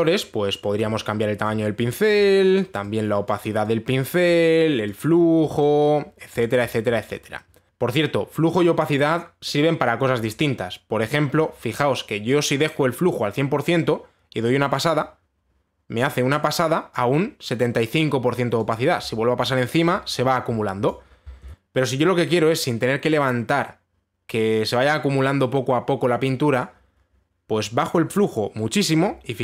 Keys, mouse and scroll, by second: 1.3 click, 2.7 click, 3.9 click, 4.9 click, 5.8 click, 7.7 Delete, 7.7 click, 12.0 click, 17.5 click, 21.5 click, 21.5 ctrl+z.